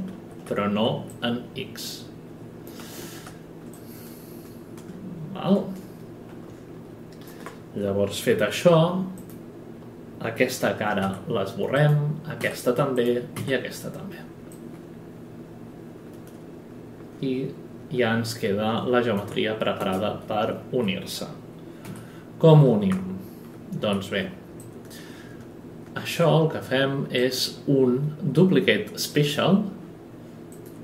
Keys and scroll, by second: 0.1 ctrl+z, 2.8 ctrl+z, 8.3 F11, 11.0 Delete, 19.8 space, 21.8 F8, 23.8 q.